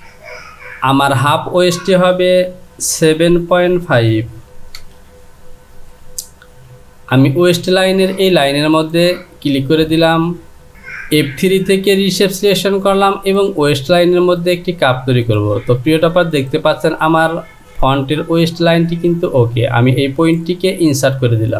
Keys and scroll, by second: 3.0 KP_7, 4.7 Return.